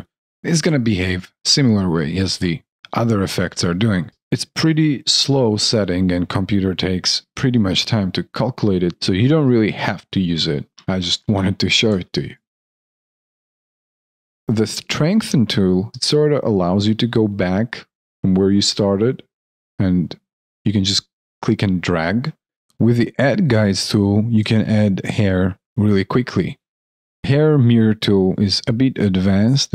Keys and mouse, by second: 0.6 alt+click, 4.1 alt+click, 5.8 alt+middle click, 7.4 alt+right click, 7.5 alt+click, 12.5 ctrl+z, 13.1 ctrl+z, 13.2 alt+click, 14.4 alt+right click, 15.9 alt+click, 24.4 alt+click, 27.1 alt+middle click.